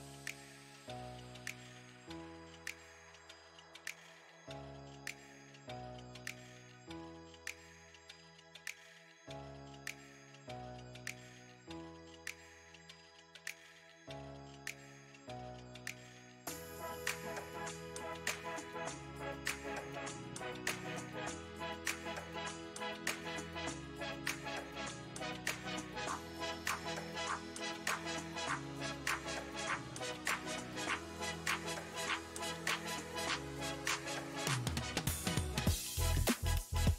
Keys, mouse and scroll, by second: 1.5 space, 2.0 f, 2.7-6.5 shift+drag, 7.1 middle click, 7.4-8.5 shift+drag, 8.5 middle click, 8.9 shift+click, 9.7 middle click, 10.1-12.4 shift+drag, 12.4 middle click, 12.8-14.8 shift+drag, 14.8-17.0 middle drag, 17.0 f, 17.9 f, 18.7-23.6 drag, 23.6-25.8 middle drag, 25.8-28.4 drag, 28.4-30.1 middle drag, 30.1-31.3 drag, 31.3 middle click, 31.9 click, 32.4 middle click, 33.0-34.0 drag, 34.0-35.3 middle drag, 35.3-36.9 shift+drag.